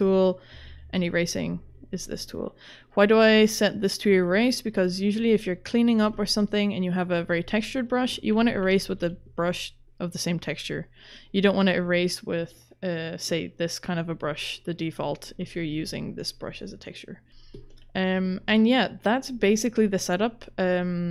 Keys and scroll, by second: 0.5 e, 6.0 v, 8.8 e, 15.5 v, 18.1 v.